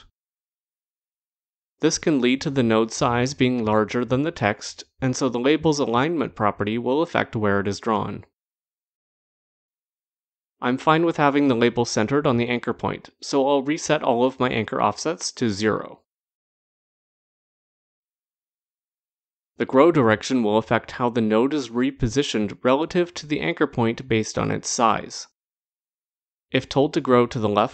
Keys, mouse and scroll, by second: 5.6 click, 8.0 click, 9.6 click, 11.7 click, 12.8 click, 13.8 click, 16.3 click, 19.1 click, 20.3 click, 22.2 click, 25.6 click, 27.1 click.